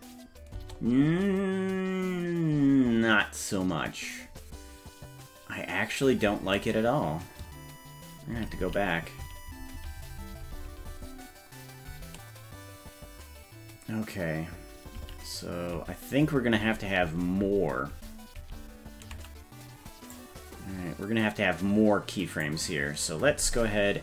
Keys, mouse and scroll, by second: 0.6 space, 9.4 ctrl+z, 10.6 ctrl+z, 11.8 ctrl+z, 12.6 ctrl+z, 13.0 ctrl+z, 15.4 ctrl+z, 16.2 ctrl+z, 16.7 ctrl+z, 17.5 ctrl+z, 18.0 ctrl+z, 18.5 ctrl+z, 20.2-22.5 drag.